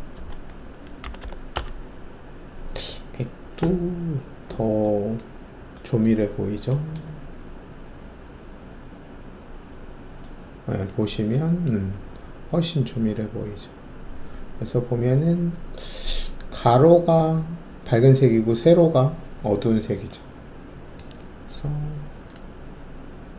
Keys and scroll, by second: 0.1 Tab, 0.3-1.2 typing, 1.5 Return.